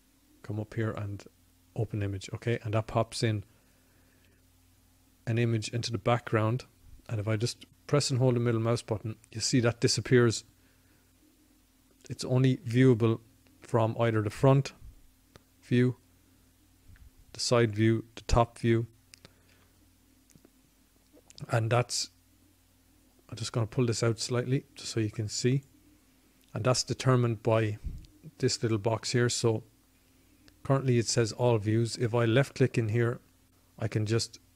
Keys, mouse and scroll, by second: 0.0-1.5 drag, 7.1-8.2 middle drag, 12.3 KP_1, 15.5 KP_3, 17.1 KP_7, 18.3 KP_1, 22.7-25.6 drag, 32.7-34.5 drag.